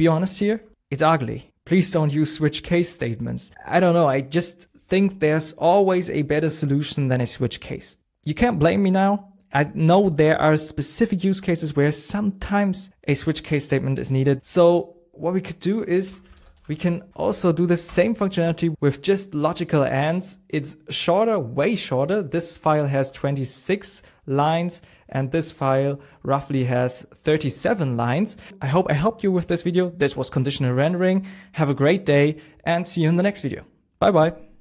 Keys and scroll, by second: 0.5 super+Tab, 16.0 super+p, 17.1 Down.